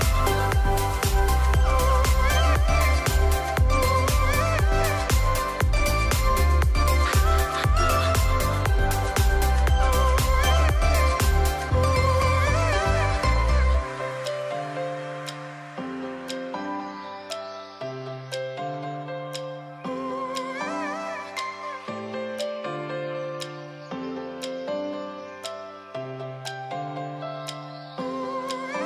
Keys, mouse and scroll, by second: 0.8-1.1 alt+scroll up 2, 1.6-2.5 alt+scroll up 1, 2.8-4.5 alt+drag, 17.5-19.7 alt+drag, 22.7-23.6 drag, 25.5 \, 27.6 Return.